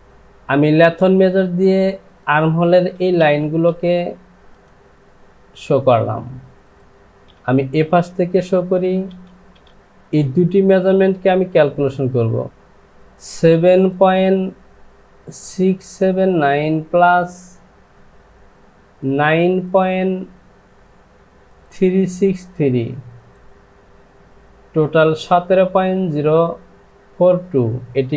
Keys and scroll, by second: 3.4 space, 7.3 ctrl+z, 8.8 space, 9.3 space, 9.7 space.